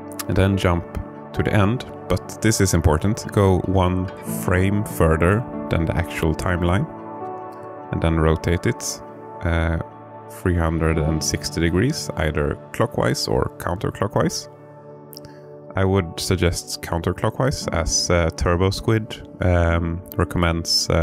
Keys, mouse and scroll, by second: 0.1 click, 3.4-7.5 drag, 9.8 r, 10.9 z, 15.5 click, 17.2-21.0 drag.